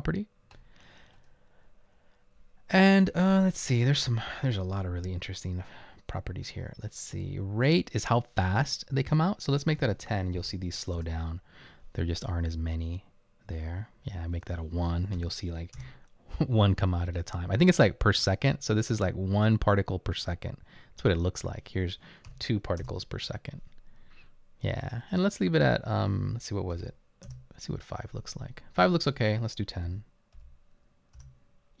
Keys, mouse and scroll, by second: 9.9-10.4 typing, 11.0 Return, 15.2 typing, 15.8 Return, 21.0 typing, 22.3 typing, 22.8 Return, 26.7-27.5 typing, 29.8-31.2 typing.